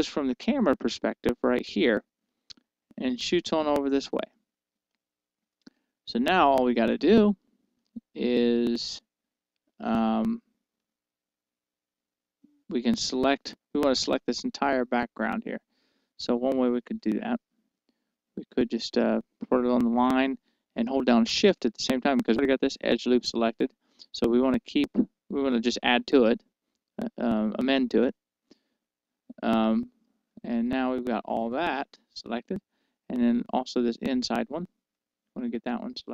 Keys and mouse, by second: 0.6-1.9 middle drag, 3.4-4.8 middle drag, 5.9-10.7 middle drag, 11.5-13.4 middle drag, 16.0-19.7 middle drag, 29.8-31.5 right drag, 31.5-33.9 middle drag, 35.3-36.1 right drag.